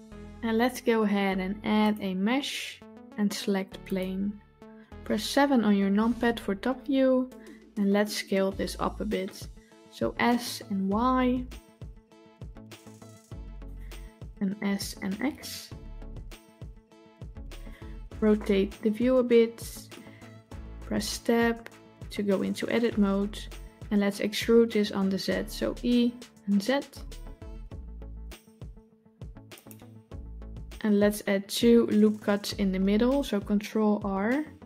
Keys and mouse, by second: 1.7-3.9 drag, 5.5 KP_7, 10.1 s, 14.5 s, 18.2-19.8 middle drag, 21.1 Tab, 25.7 e, 33.8 ctrl+r.